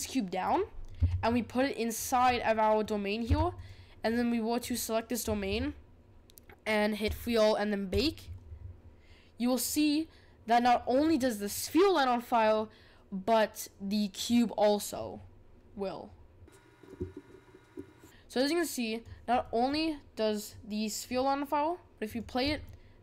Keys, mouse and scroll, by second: 0.9 g, 2.3-3.2 middle drag, 3.2 g, 4.0 click, 4.6 click, 7.6-17.8 drag, 18.0-19.4 drag, 19.4-20.5 middle drag, 20.5-22.5 drag, 22.5-23.0 middle drag.